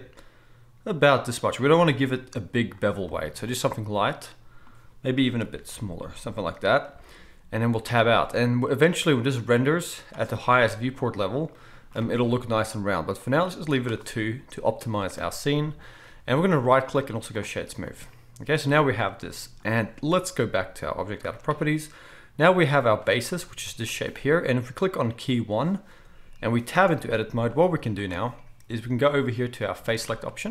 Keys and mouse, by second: 2.7-6.1 middle drag, 5.4 shift+e, 6.1-9.4 drag, 7.9 Tab, 9.4-21.1 middle drag, 21.1-25.0 right drag, 25.0 middle click, 25.1-27.7 right drag, 26.7 Tab, 27.7-29.7 drag, 27.7 z, 29.7-30.5 middle drag.